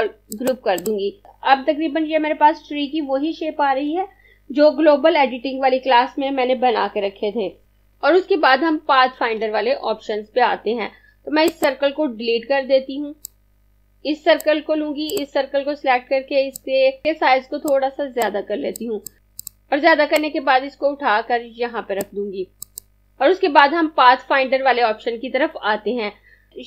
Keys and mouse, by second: 0.2 click, 11.4 click, 12.4 Delete, 13.3 click, 17.0 z, 17.6 click.